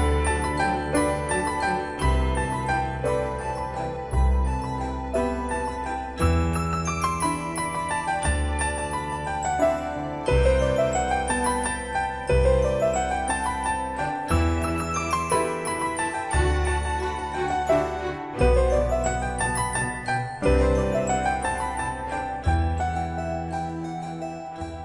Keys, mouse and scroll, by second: 18.0-24.8 drag.